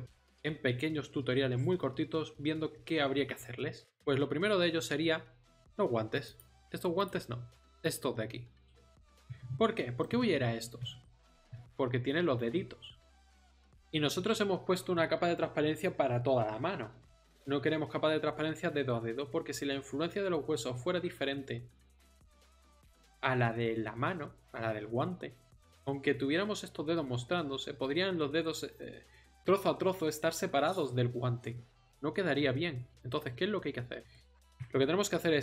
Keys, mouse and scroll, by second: 5.6-9.9 drag, 34.0 KP_1.